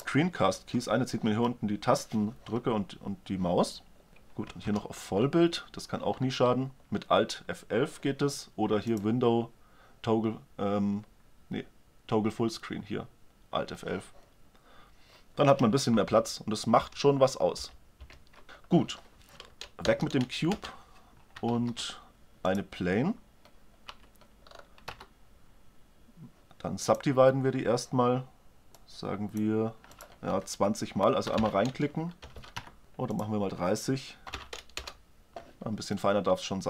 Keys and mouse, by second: 1.4-2.4 middle drag, 4.6 alt+F11, 4.6-6.2 middle drag, 7.8-8.4 middle drag, 8.7-10.7 drag, 15.9 alt+F11, 16.6 alt+F11, 17.4 alt+F11, 17.9 alt+F11, 19.6 Delete, 21.4 shift+a, 23.8 Tab, 24.4 middle click, 24.7 w, 28.6-31.6 drag, 32.2 BackSpace, 33.0-34.9 drag, 35.8-36.6 middle drag.